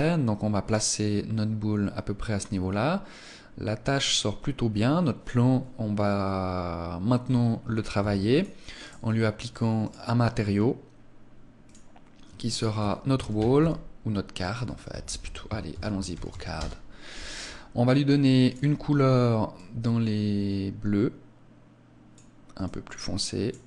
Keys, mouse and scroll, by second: 6.9 Escape, 7.8 ctrl+s, 8.7 right click, 9.7 click, 10.3-10.7 scroll up 4, 11.5 click, 12.4 click, 18.3 click.